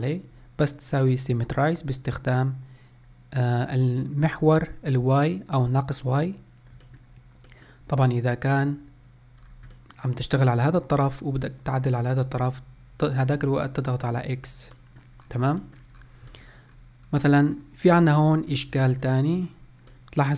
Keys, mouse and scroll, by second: 6.8-9.3 shift+middle drag, 9.3-9.7 scroll down 1, 9.7-12.6 middle drag, 14.5 middle click, 15.0 scroll up 2, 15.4 middle click, 15.8-16.1 scroll up 4, 16.1 shift+middle click, 16.8-17.2 scroll down 1, 17.2 shift+middle click, 17.6-18.3 scroll up 1, 18.3 Tab, 18.7 shift+middle click, 19.1 Tab, 19.6-20.3 middle drag.